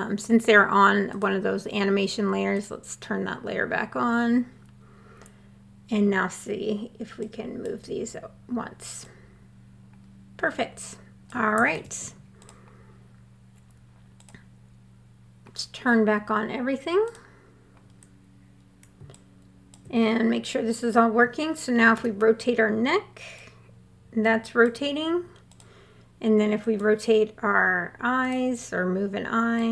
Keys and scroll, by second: 11.1 super+z, 21.3 e.